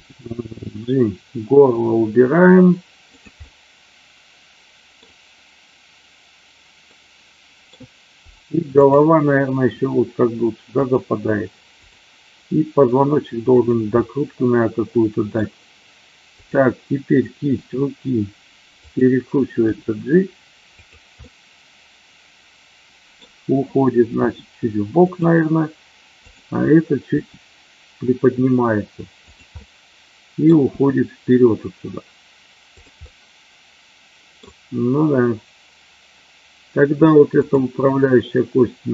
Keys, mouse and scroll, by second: 0.0 g, 3.1 drag, 3.4-5.0 middle drag, 3.4 scroll up 1, 4.9 scroll down 1, 6.9 middle click, 7.6 scroll down 1, 9.8 r, 10.8 click, 11.6 click, 13.5 click, 14.0-15.4 middle drag, 16.4 click, 17.5 r, 18.8 click, 19.6 g, 20.8 click, 21.1-23.1 middle drag, 24.1 g, 25.1 click, 26.1 click, 27.1 g, 29.2 click, 29.5 middle click, 30.6 g, 33.0-34.4 middle drag, 37.4 click.